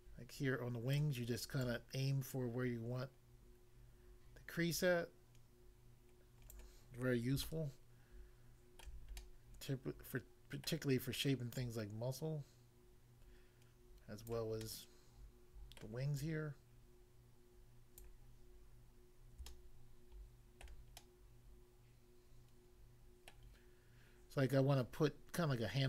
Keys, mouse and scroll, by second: 1.0 click, 1.6 click, 6.6 click, 7.4 shift+middle click, 10.6 middle click, 11.6 click, 14.3 click, 14.7 middle click, 15.8 middle click, 16.2 click, 18.0 click, 19.4 shift+middle click, 23.3 middle click.